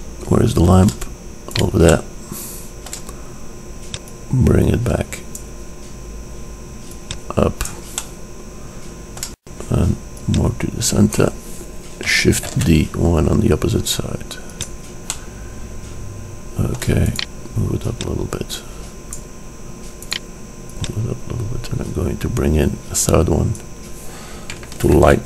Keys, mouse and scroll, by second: 0.1-3.4 drag, 3.4-4.4 middle drag, 4.4-6.2 drag, 7.1-8.8 drag, 8.8-10.1 middle drag, 10.3-12.3 drag, 12.7 shift+d, 17.3-18.1 drag, 18.1-19.1 middle drag, 19.1-20.0 drag, 20.2-21.1 drag, 21.1 middle click, 22.1 click.